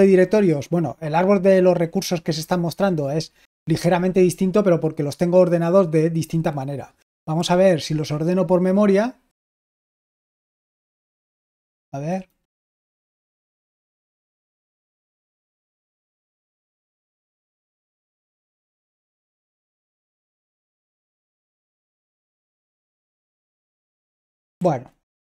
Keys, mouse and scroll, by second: 7.3 l, 12.7 Delete, 16.2-17.2 typing, 17.8 Return, 18.1 Return, 18.9 Right, 21.6 Return, 22.2 Left, 24.5 Left.